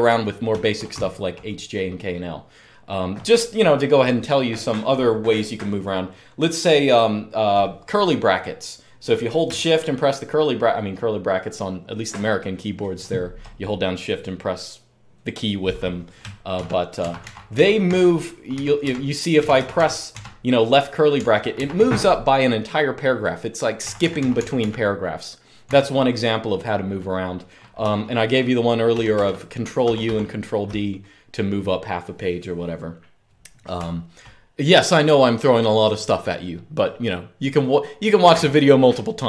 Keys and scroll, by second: 0.0-1.8 typing, 16.3-21.5 typing, 23.6-24.1 typing, 25.5 typing, 28.7 ctrl+u, 28.9 ctrl+u, 29.6 ctrl+d, 29.8 ctrl+d, 33.5-33.9 typing.